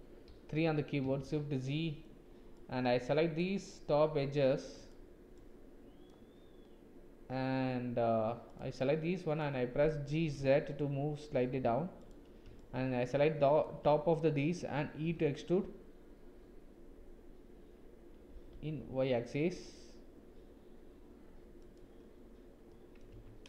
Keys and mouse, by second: 0.3 KP_3, 1.2 shift+z, 1.7 shift+click, 2.5 click, 4.7 click, 5.4 click, 8.5 click, 8.8 click, 10.2 g, 12.6 shift+click, 15.0 e, 22.7 middle click, 23.2 Tab.